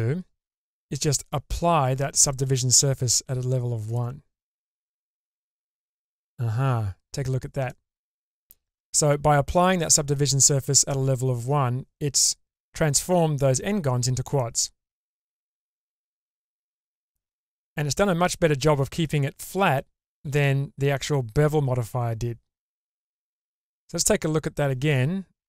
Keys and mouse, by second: 3.9-5.1 drag, 7.7-8.5 middle drag, 14.4-15.3 middle drag, 16.3 Tab, 23.1 Tab.